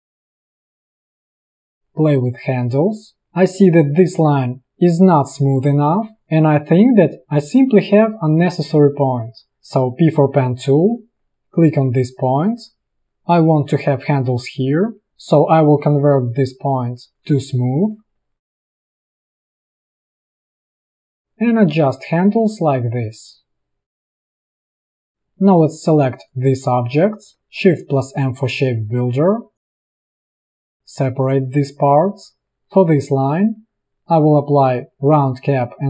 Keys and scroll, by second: 3.7 space, 9.9 p, 11.9 a, 28.0 shift+m, 30.2 space.